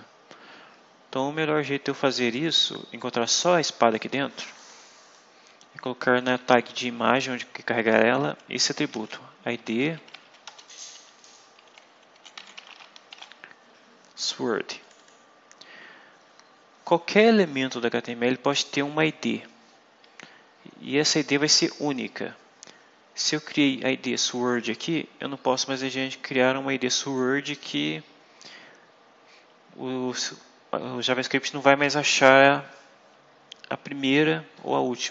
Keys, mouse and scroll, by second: 4.5 click, 6.5 Left, 6.9 Right, 8.5-10.4 typing, 10.6 shift+Left, 11.8-13.5 typing, 14.7 click, 25.7-26.1 scroll down 2.